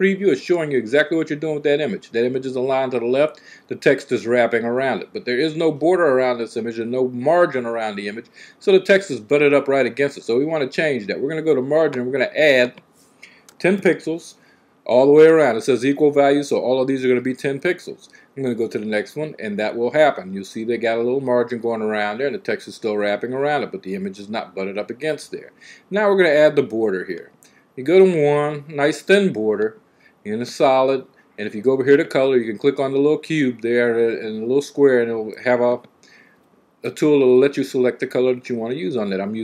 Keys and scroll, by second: 13.2 typing.